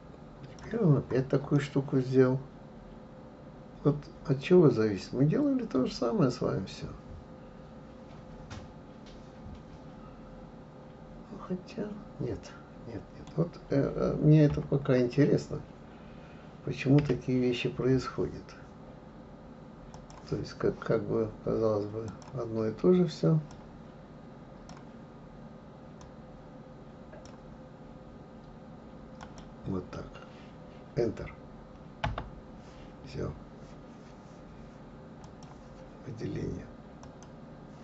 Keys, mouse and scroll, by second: 1.5-4.6 middle drag, 14.5 KP_3, 17.0 Delete, 19.9-22.9 drag, 35.2-37.2 drag.